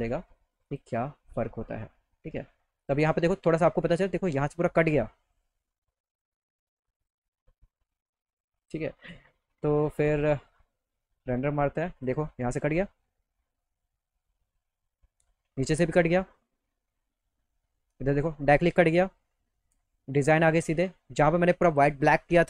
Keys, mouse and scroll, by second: 0.7 click, 2.8 click, 3.0 click, 7.0 click, 8.7 click, 10.0 click, 12.1 click, 12.3 scroll up 1, 15.3 middle click, 16.5 middle click, 16.9 middle click, 19.1 middle click, 19.5 middle click, 19.6 middle click.